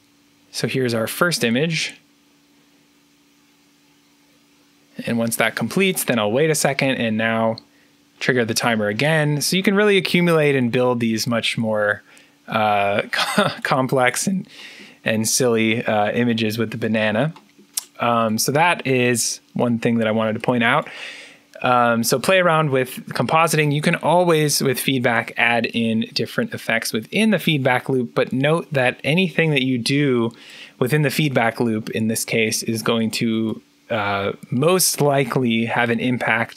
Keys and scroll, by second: 0.0-0.5 typing, 6.7 3.